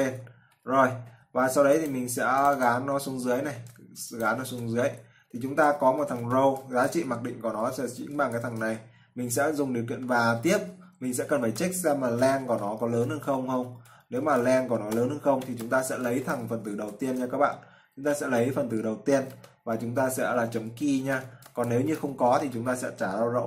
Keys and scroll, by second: 0.1 ctrl+v, 3.8 ctrl+c, 4.7 ctrl+v.